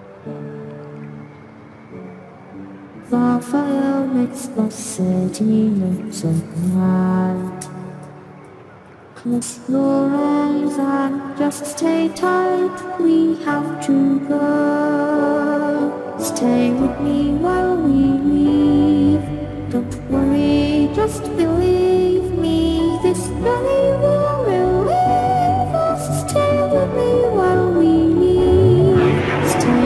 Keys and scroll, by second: 1.2 ctrl+t, 15.4 ctrl+t, 23.0 Return, 23.8 Return, 25.9 ctrl+j, 29.4 ctrl+t.